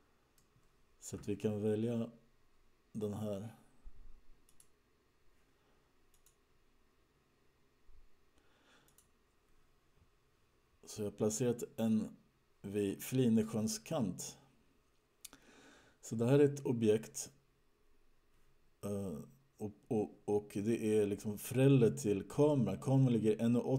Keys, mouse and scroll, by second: 4.7 click, 6.3 click, 11.4-12.5 scroll down 5, 12.5-13.2 scroll down 4, 13.2-14.1 scroll down 1, 14.1-15.0 scroll up 2, 15.0-16.0 scroll up 3.